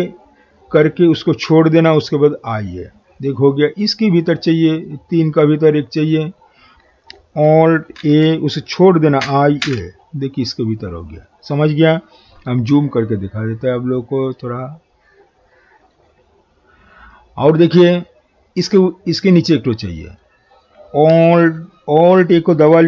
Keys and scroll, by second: 8.0 alt+a.